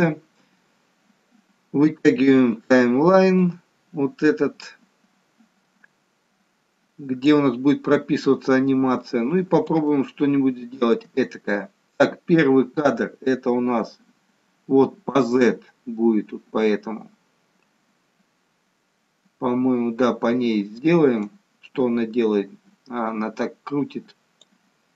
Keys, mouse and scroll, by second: 3.5 click, 9.9 shift+middle click, 21.1 click.